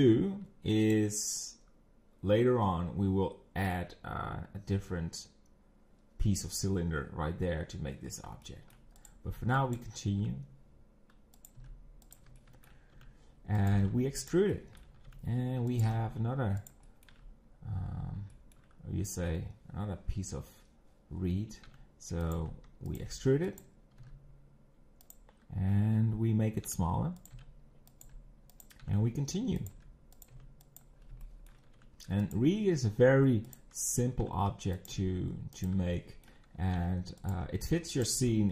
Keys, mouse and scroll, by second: 0.9 click, 8.0 scroll down 1, 8.4 shift+middle click, 9.1 click, 9.8 b, 10.4 e, 11.6 g, 12.4 shift+middle click, 12.9 e, 13.7 g, 14.5 shift+middle click, 15.1 e, 15.9 g, 16.8 shift+middle click, 17.2 scroll up 4, 17.9 scroll down 4, 18.3 shift+middle click, 19.1 scroll up 2, 21.6 e, 22.4 5, 23.0 g, 24.1 g, 26.6-30.3 typing, 31.0 scroll down 4, 31.2 shift+middle click, 31.8 e, 32.4 g, 33.7 scroll up 2, 34.2 e, 34.9 g, 36.0 shift+middle click, 36.7 e, 37.4 g, 38.1 s.